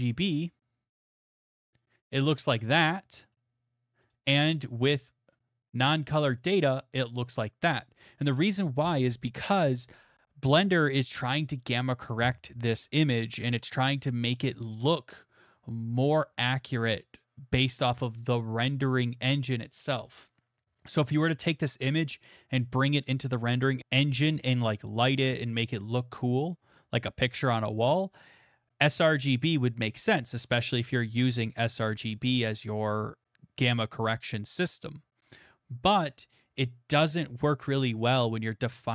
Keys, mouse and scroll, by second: 1.2 click, 3.2 middle click, 4.1 click, 6.4 click.